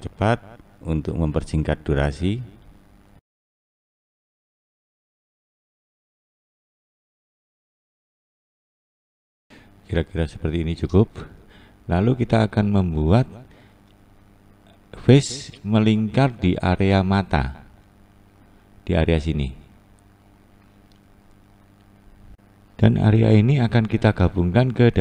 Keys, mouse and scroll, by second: 0.5-1.2 scroll down 1, 1.5-2.8 scroll up 1, 2.8 click, 3.3 click, 3.7 click, 3.7 click, 3.9 click, 4.0 click, 4.4 scroll down 1, 4.6 click, 4.7 click, 4.9 click, 5.0 click, 5.5 click, 5.6-6.2 click, 5.9 click, 6.0 click, 6.1 click, 6.4 click, 6.7 click, 6.8 click, 7.0 click, 7.2 click, 7.3 click, 7.6 click, 7.6 click, 7.9 click, 7.9 click, 8.2 click, 8.2 click, 8.5 click, 8.8 click, 8.9 click, 9.1 click, 9.2 scroll up 2, 9.4-10.4 scroll down 5, 10.4-11.6 scroll up 1, 11.6-12.5 scroll up 1, 12.5-14.6 scroll up 2, 14.6-15.6 scroll up 1, 15.6-16.1 scroll up 1, 16.5-17.2 scroll down 1, 17.2-22.4 scroll down 1, 22.4 click.